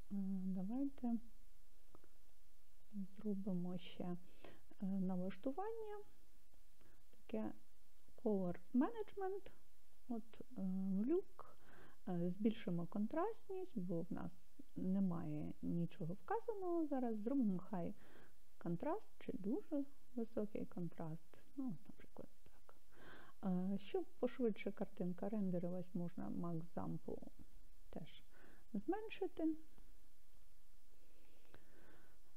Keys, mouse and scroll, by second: 2.9 click, 4.7-6.7 scroll down 6, 6.7-7.5 scroll down 2, 10.0-17.9 drag, 20.3-23.1 scroll up 11, 23.1-23.7 scroll up 2, 26.6-31.5 drag, 30.6 0.